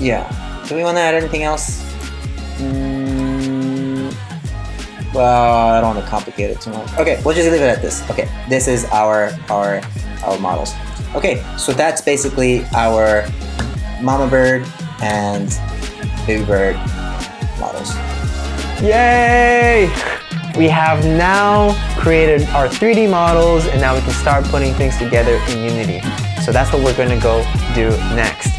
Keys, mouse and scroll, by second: 1.8-2.2 scroll up 2, 2.2-2.8 scroll down 3, 2.8 middle click, 2.8-3.6 scroll down 1, 8.3 middle click.